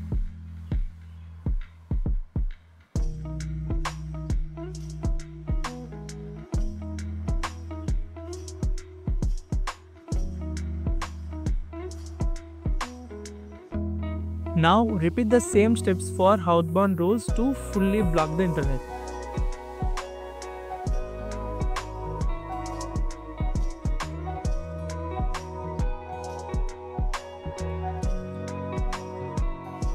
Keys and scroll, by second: 9.1 typing.